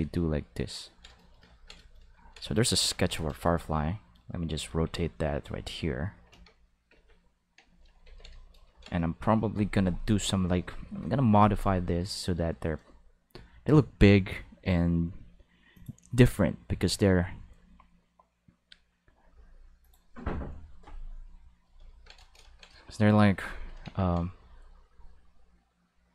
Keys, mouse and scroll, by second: 0.0 click, 0.8 ctrl+middle click, 1.3 shift+middle click, 1.5 ctrl+middle click, 1.9 middle click, 2.2 ctrl+middle click, 2.5 middle click, 2.7 Tab, 3.0 a, 3.5 r, 4.5 click, 5.3 click, 6.9 alt+a, 8.0 ctrl+s, 15.7 click, 19.8 click, 23.9 ctrl+Tab, 24.3 click.